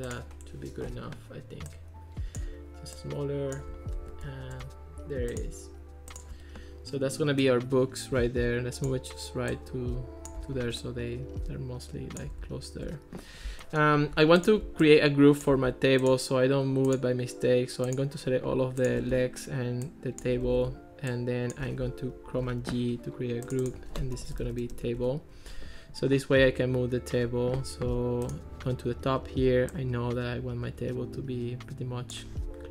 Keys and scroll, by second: 20.5 super+z, 22.4 super+g, 24.0-25.1 typing.